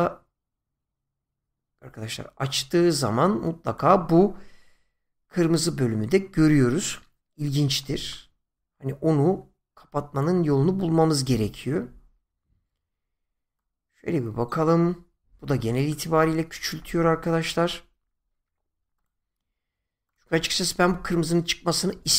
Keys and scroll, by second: 16.1 ctrl+z.